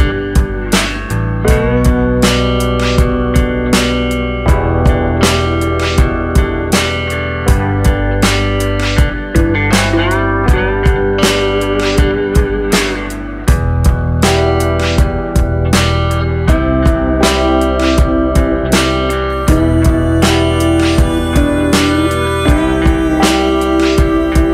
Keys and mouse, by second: 4.8 shift+middle click, 6.3 k, 14.7 middle drag, 15.1 shift+middle drag, 15.4 middle click, 15.8 shift+middle click, 17.5 click, 18.0 middle click, 18.7 middle click, 19.1 shift+middle click, 20.0 shift+middle click, 20.9 shift+click, 21.5 shift+click, 21.8 middle click, 22.2 shift+middle click, 22.9 middle click, 23.3 shift+middle click.